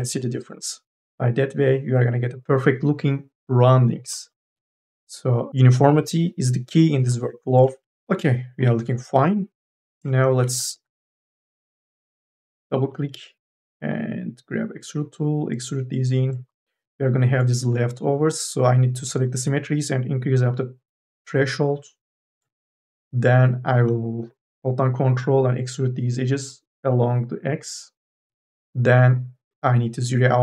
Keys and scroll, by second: 4.8 ctrl+z, 5.5 q, 7.6 q, 8.7-11.9 typing.